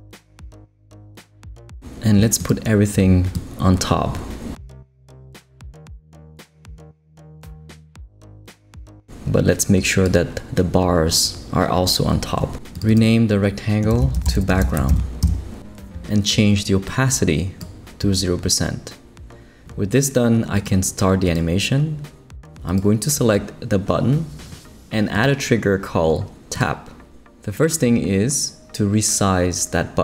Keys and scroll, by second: 0.4 super+Return, 13.7-15.4 typing.